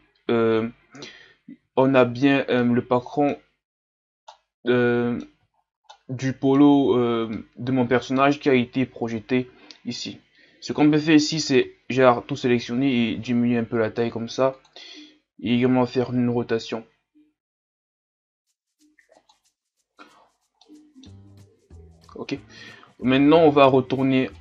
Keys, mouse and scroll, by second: 1.2-1.7 scroll up 5, 1.8 scroll up 1, 1.9 shift+scroll down 3, 2.6-3.6 middle drag, 3.6-4.2 scroll up 4, 4.3-5.5 middle drag, 5.5-5.9 scroll up 1, 5.9-6.9 middle drag, 6.9-7.3 scroll down 2, 7.3-10.9 middle drag, 10.9 a, 11.3 a, 11.6 a, 12.6 s, 15.2 r.